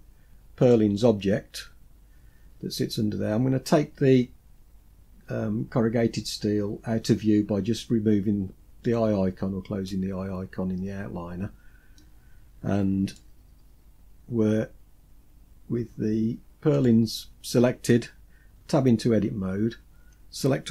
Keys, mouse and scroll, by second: 1.5-2.9 scroll up 4, 8.1 click, 12.3 shift+middle click, 16.0 click, 17.9 Tab, 19.1-20.7 scroll down 2.